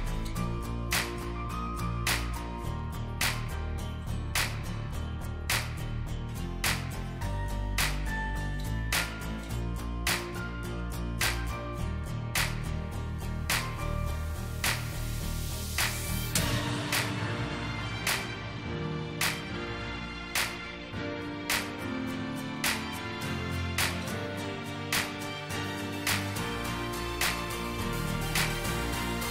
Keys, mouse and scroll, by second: 0.7 double click, 1.3 shift+click, 6.6 double click, 14.7 double click, 17.3 alt+click, 17.9 ctrl+z, 18.4 alt+scroll up 1, 19.1 alt+click, 20.4 alt+scroll down 2, 21.4 double click, 22.1 shift+click, 27.0 ctrl+g.